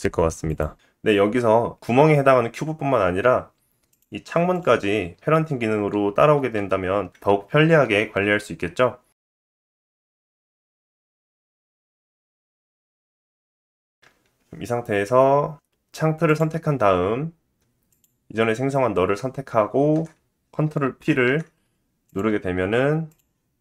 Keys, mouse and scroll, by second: 0.8-3.9 middle drag, 3.9 click, 4.5 click, 4.6-10.2 middle drag, 6.6 g, 10.2 shift+click, 10.6 l, 10.8 middle click, 10.9 click, 11.8 middle click, 11.8 click, 12.7 middle click, 12.7-13.8 drag, 13.1 BackSpace, 13.3 s, 13.8-16.3 middle drag, 13.8 click, 16.3 click, 17.9 ctrl+click, 21.0 ctrl+p, 23.1 click.